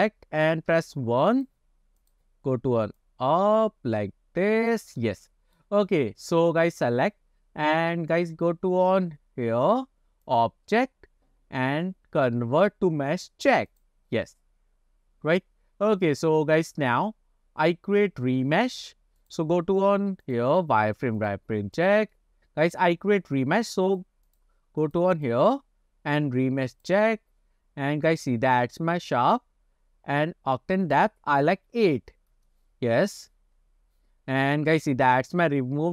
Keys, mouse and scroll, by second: 0.8 KP_1, 1.4 click, 2.1 click, 3.1-4.8 drag, 5.1-5.7 middle drag, 6.6 click, 10.3 click, 11.7-13.4 drag, 18.0-18.4 scroll up 2, 19.3 click, 20.3 click, 20.6-22.0 drag, 22.2-22.9 middle drag, 23.9 click, 24.3 click, 24.9 click, 25.2-27.0 drag, 29.3 click, 30.9-32.6 drag, 33.0-33.6 scroll down 2, 33.6 scroll up 3.